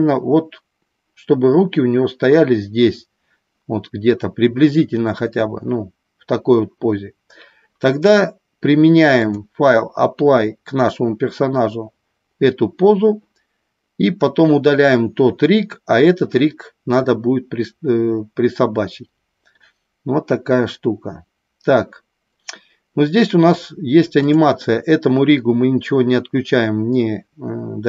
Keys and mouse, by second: 9.3-12.0 drag, 24.2 click.